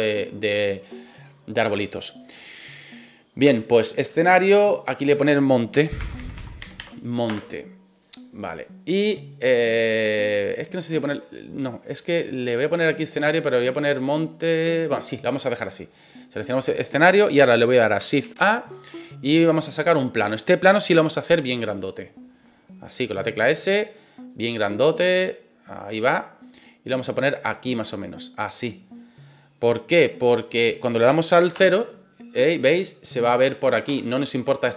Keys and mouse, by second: 0.7-1.7 middle drag, 4.5 click, 4.7-8.0 drag, 11.2-14.1 drag, 14.4 click, 15.2 click, 18.2 shift+a, 20.9 s, 22.3 click, 23.2 click, 24.3-25.8 drag, 26.0 middle click, 26.9 click, 28.7 click, 30.4 middle click, 31.5 KP_0, 33.8 KP_0.